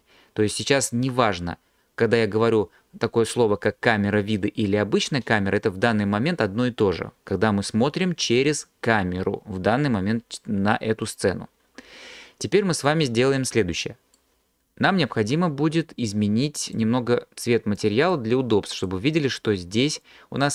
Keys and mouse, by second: 16.7 click.